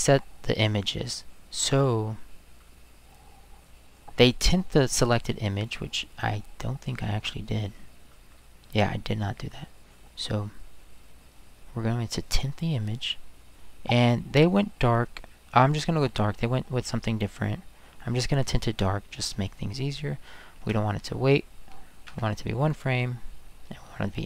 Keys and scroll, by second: 20.6 space, 22.0 1.